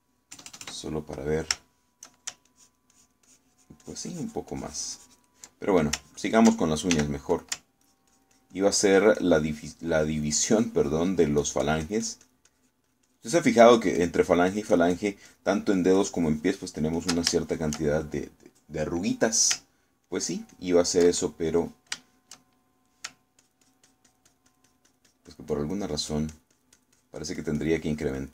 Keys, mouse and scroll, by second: 1.4 KP_Add, 2.7 shift+middle click, 3.5-6.5 ctrl+shift+drag, 7.0 ctrl+click, 8.0 ctrl+f, 8.0 click, 8.4 ctrl+click, 8.9-16.3 ctrl+drag, 16.3-18.3 ctrl+drag, 18.4-20.3 ctrl+shift+middle drag, 21.1-22.2 ctrl+drag, 22.3 ctrl+middle click, 23.1 shift+middle click, 24.5-28.3 ctrl+drag.